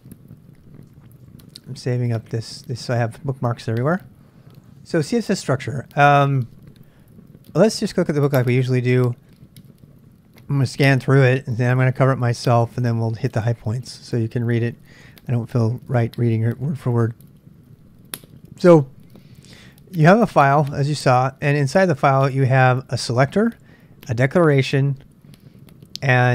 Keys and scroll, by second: 0.8-2.0 typing, 7.9 Tab, 17.3 j.